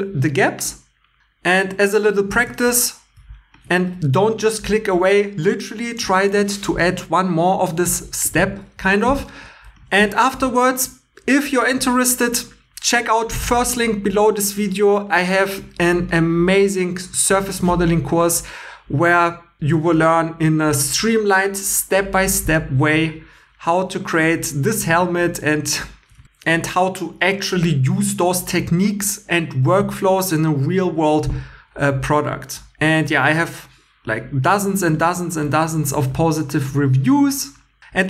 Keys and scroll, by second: 24.9 super+Tab, 26.2 super+Tab.